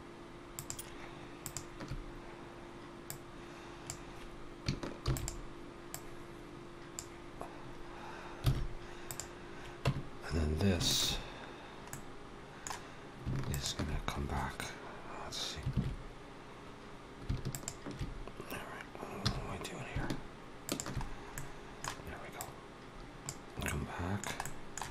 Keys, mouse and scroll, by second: 0.3 shift+click, 1.3 shift+click, 2.9 click, 4.9 shift+d, 5.7 click, 8.3 alt+a, 8.9 click, 9.6 Tab, 10.7 alt+shift+click, 11.7 middle click, 13.3 alt+shift+click, 15.6 alt+a, 17.3 alt+shift+click, 19.1 2, 20.6 alt+shift+click, 20.9-21.6 scroll down 3, 21.2 middle click, 22.2 click, 23.5 middle click, 24.3 middle click.